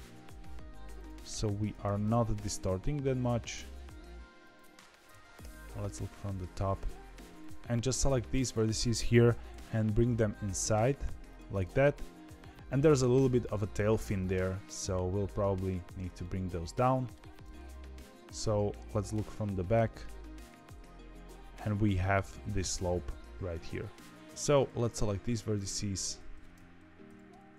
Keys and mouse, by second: 5.3 KP_7, 7.7 click, 9.2 g, 11.4 middle click, 16.1 middle click, 18.6 KP_1, 19.1 KP_9, 20.0 shift+middle click, 20.4 z, 24.0 KP_1, 24.0 KP_9, 24.3 middle click, 27.0 KP_1, 27.2 KP_9.